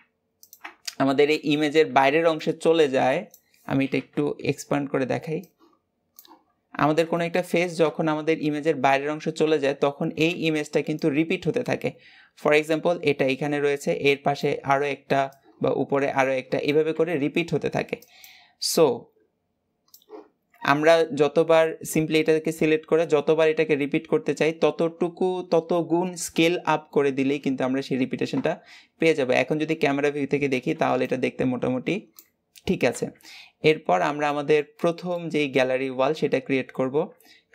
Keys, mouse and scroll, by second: 1.2 Tab, 5.6-8.2 drag, 8.2 Tab, 9.3 Tab, 18.1 click, 18.7-20.0 drag, 20.0 scroll down 3, 20.8 Tab, 28.2 KP_0, 34.1-35.9 middle drag, 35.9 Tab.